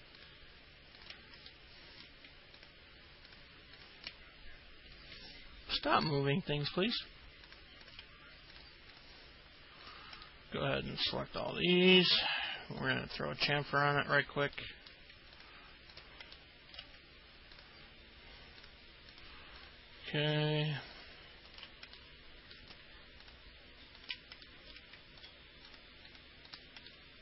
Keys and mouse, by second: 1.7 alt+middle click, 3.9 ctrl+click, 7.0 alt+middle click, 8.0 ctrl+click, 8.7 ctrl+click, 9.1 ctrl+click, 10.0 ctrl+click, 10.4 alt+middle click, 12.3 ctrl+click, 13.0 ctrl+click, 13.3 ctrl+click, 14.2 ctrl+click, 14.7 alt+middle click, 15.5 ctrl+click, 16.1 ctrl+click, 16.5 alt+middle click, 18.8 ctrl+click, 19.3 ctrl+click, 19.8 ctrl+click, 20.4 ctrl+click, 21.1 ctrl+click, 21.7 ctrl+click, 22.1 alt+middle click, 23.4 ctrl+click, 24.2 ctrl+click, 24.6 alt+middle click, 25.4 ctrl+click, 26.3 ctrl+click, 26.7 ctrl+click, 27.1 alt+middle click.